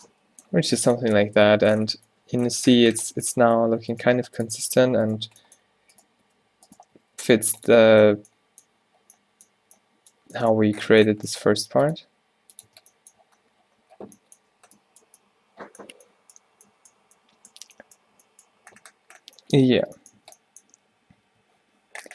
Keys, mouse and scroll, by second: 0.6 a, 1.1 a, 1.5 a, 2.6 Tab, 4.1 g, 4.8 click, 5.3 z, 6.3 g, 7.0 z, 7.2 g, 7.8 Tab, 11.2 Tab, 11.6 ctrl+r, 12.7 Tab, 19.9 Tab, 20.2 Tab, 21.2 ctrl+t.